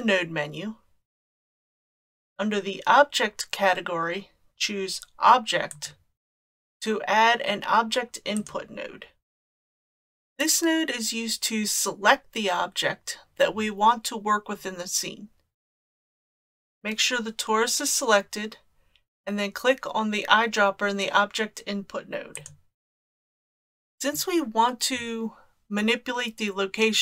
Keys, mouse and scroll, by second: 9.5-9.9 scroll down 2, 22.3 click.